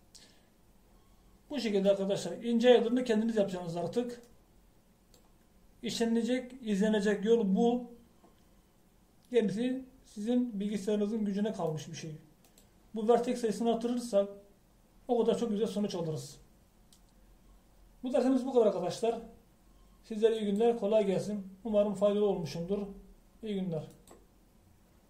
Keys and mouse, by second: 3.2-5.0 middle drag, 5.5-7.2 middle drag, 13.0-20.1 drag.